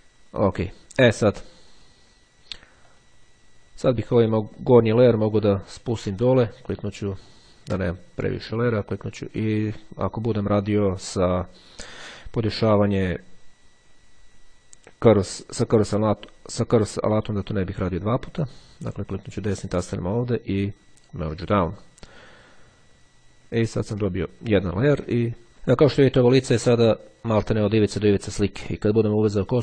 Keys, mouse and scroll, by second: 3.0 click, 4.6-5.8 drag, 7.3 click, 8.5-11.3 drag, 19.3 click, 21.2 click, 24.2-24.8 ctrl+scroll up 2.